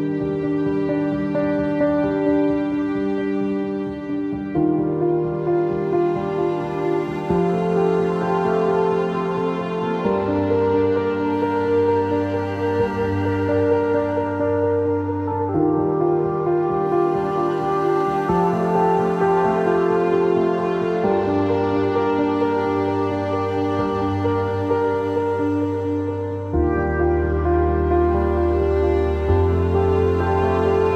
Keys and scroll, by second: 27.0 z, 27.7 alt+x.